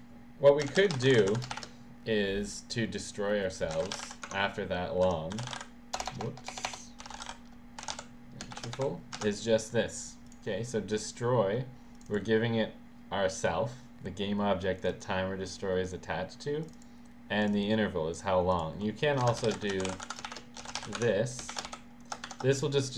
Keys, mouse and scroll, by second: 0.5-1.7 typing, 3.6-8.6 typing, 9.2 ctrl+s, 10.3 click, 12.0 click, 14.8 click, 16.6 click, 17.4 click, 17.6 click, 18.5 click, 19.2 Return, 19.3-22.2 typing, 22.3 shift+Home.